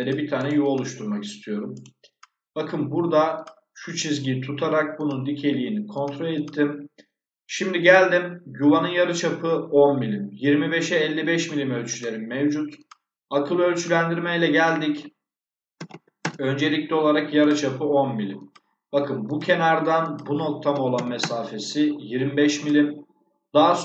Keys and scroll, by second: 15.7 1, 16.1 Return, 20.6 2, 20.8 5, 21.1 Return.